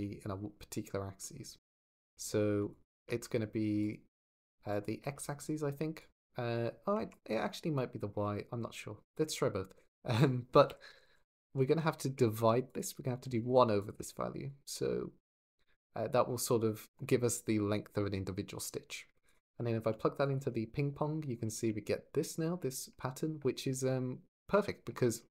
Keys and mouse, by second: 1.0 click, 1.6 click, 3.6 ctrl+shift+click, 3.9 ctrl+shift+click, 4.5 ctrl+shift+click, 5.8 click, 6.8 Escape, 12.5 drag, 13.0 alt+s, 13.6 click, 20.0 ctrl+shift+click.